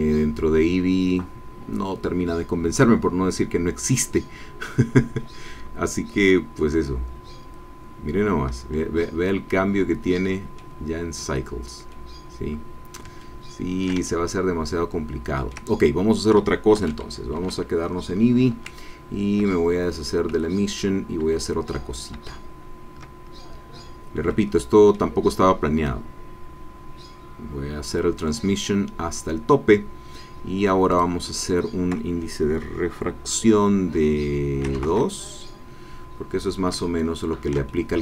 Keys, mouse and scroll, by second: 9.0-10.7 drag, 11.1 middle click, 11.9-13.1 drag, 13.2 ctrl+click, 14.0-15.7 ctrl+shift+drag, 16.7 ctrl+z, 22.8 ctrl+z, 24.3 click, 25.9-28.5 drag, 30.9 click, 34.6 KP_2, 34.7 KP_Decimal, 34.8 KP_Enter, 36.8-38.0 ctrl+drag.